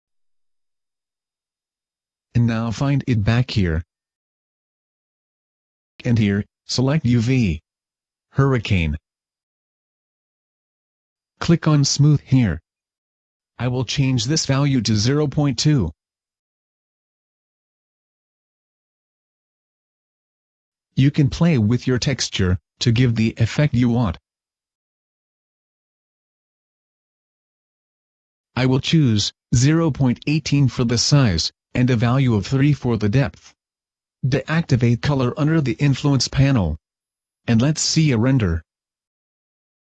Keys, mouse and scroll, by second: 1.3 click, 7.9 click, 8.8 middle click, 12.2 click, 15.4 click, 16.8-17.2 scroll up 1, 17.2 middle click, 21.2 click, 22.3-23.4 scroll down 3, 23.4 click, 24.8 click, 30.6 click, 32.4 click, 33.5 scroll down 1, 39.2 click.